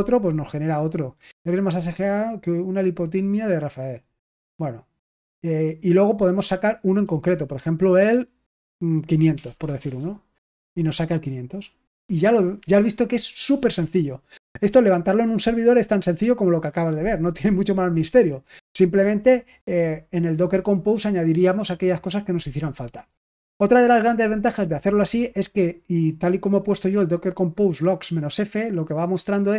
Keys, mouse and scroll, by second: 4.4 click, 4.7 click, 9.0-10.0 typing, 26.4-27.7 drag.